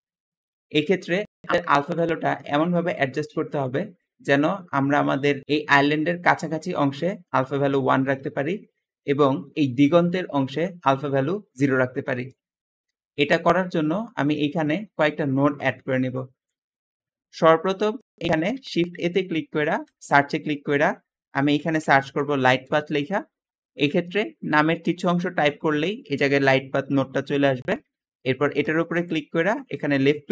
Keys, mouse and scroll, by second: 0.9 Escape, 1.0 Escape, 14.0 Escape, 14.8-16.5 scroll down 6, 15.6 middle click, 16.1 middle click, 18.3 shift+a, 18.4 shift+a, 21.1-22.9 typing.